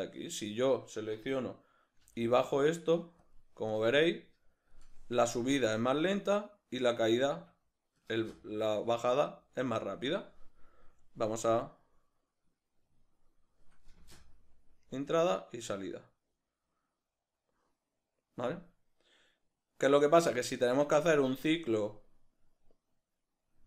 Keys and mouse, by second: 0.2 right click, 2.0 g, 2.8 g, 3.7-23.6 drag, 7.4 Escape, 8.2 space, 10.0 Escape, 14.0 space.